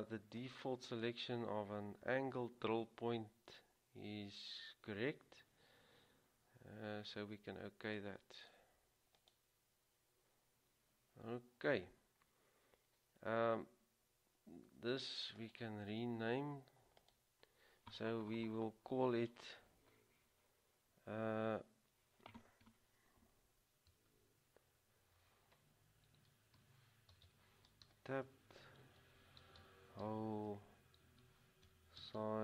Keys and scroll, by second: 26.5-32.4 typing.